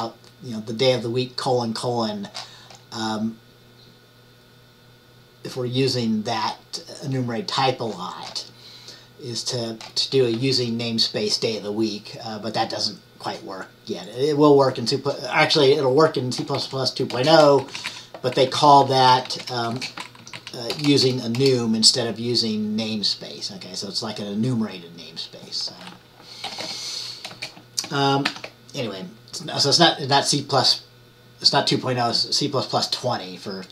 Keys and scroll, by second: 16.5-17.7 typing, 17.7 Down, 17.8 Left, 18.0 Left, 18.6 Left, 19.2-22.2 typing, 20.3 Down, 20.5 Down, 26.6-27.4 typing, 28.4 ctrl+s.